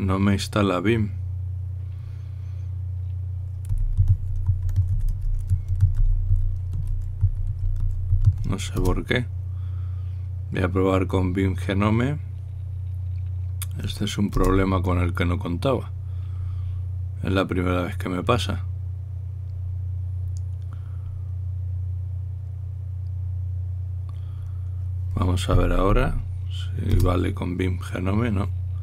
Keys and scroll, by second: 4.5-9.5 typing, 9.5 Return, 11.9 typing, 15.1 Return, 26.5 Up, 26.7 Up, 27.7 Return.